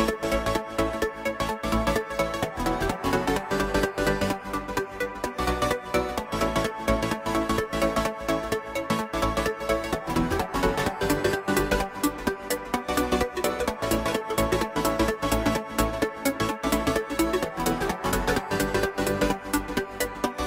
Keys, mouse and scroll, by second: 0.1-2.6 scroll up 5, 2.6 Tab, 6.9 ctrl+r, 14.5 ctrl+r.